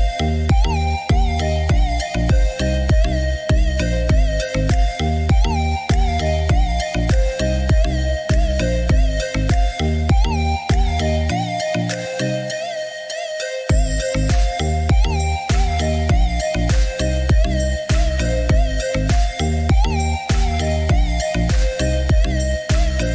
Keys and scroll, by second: 6.3 ctrl+z.